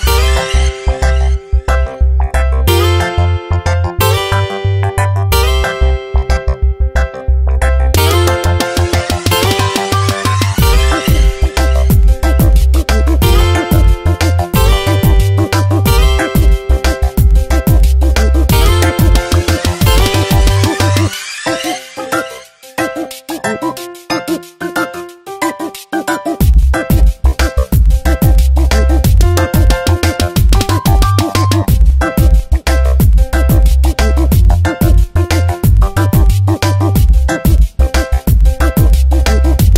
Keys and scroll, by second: 0.5 space, 5.3 space, 7.9 space, 14.9 space, 20.0 space, 23.2 space, 24.5 ctrl+z, 25.6 space, 26.2 ctrl+z, 27.6 space, 28.9 ctrl+z, 30.9 space, 33.0 space, 34.7 space, 36.4 space.